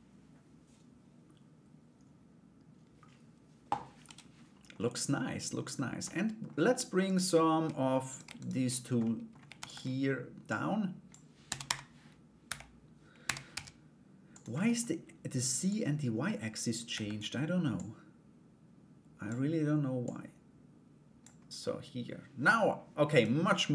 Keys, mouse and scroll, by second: 4.3 middle click, 4.7-5.6 scroll down 1, 5.6 middle click, 6.6 right click, 7.7 right click, 8.0 shift+right click, 8.6 middle click, 9.2 shift+d, 10.0 click, 11.0 r, 12.8 r, 14.1 middle click, 15.3-16.7 drag, 17.3-18.8 drag, 19.6-21.2 drag, 21.2 middle click, 22.7 right click, 23.1 middle click.